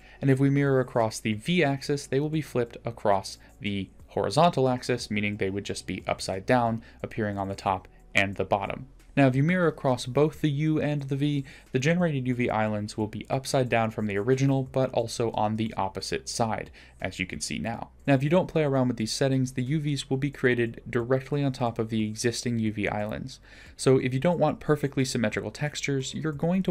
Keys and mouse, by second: 7.5 ctrl+z, 7.9 ctrl+z, 10.1-10.7 drag, 11.5 Tab, 18.0 ctrl+z, 19.8 ctrl+z.